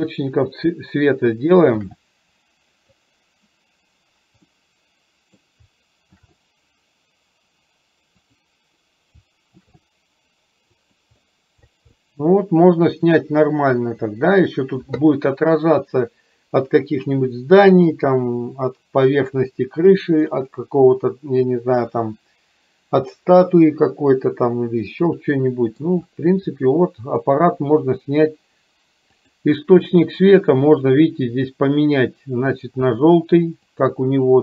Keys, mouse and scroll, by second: 1.9 shift+d, 4.7-5.7 middle drag, 6.3 shift+d, 9.8 shift+d, 12.2-13.3 middle drag, 25.2-25.9 middle drag, 26.6 middle click, 29.3 click, 30.8 click.